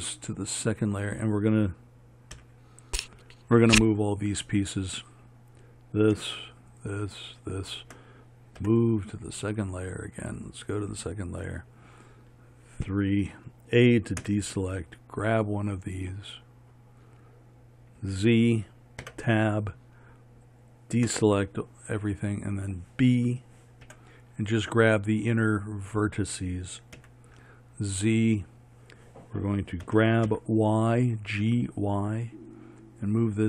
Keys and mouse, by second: 2.4 KP_1, 5.0 click, 8.7 m, 11.5 click, 13.0 KP_3, 14.3 a, 18.1 z, 19.1 Tab, 21.2 a, 24.0 b, 27.1 z, 30.0 g.